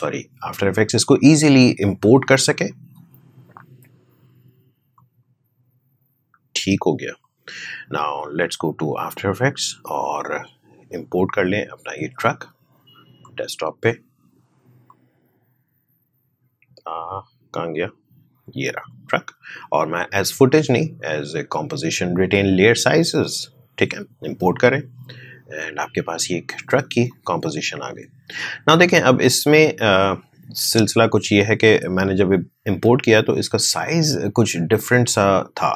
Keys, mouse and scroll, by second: 2.6 click, 13.1-18.8 drag, 22.4 click, 26.7 click, 29.9-34.1 drag.